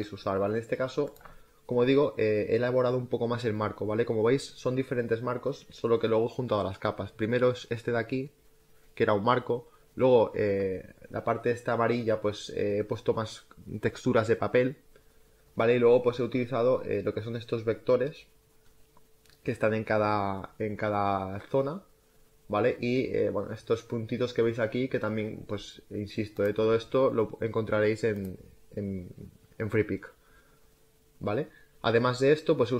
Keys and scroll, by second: 1.1 space.